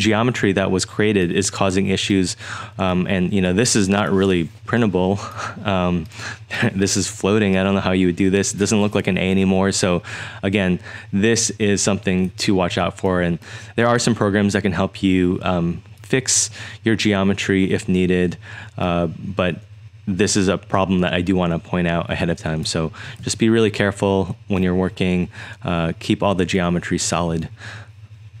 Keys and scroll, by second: 22.8 super+Tab, 23.2 super+Tab.